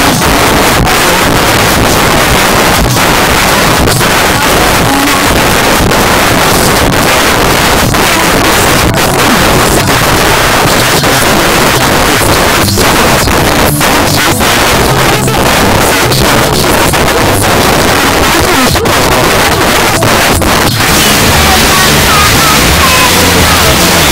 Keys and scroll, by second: 2.4 j, 2.6 Down, 2.8 Return.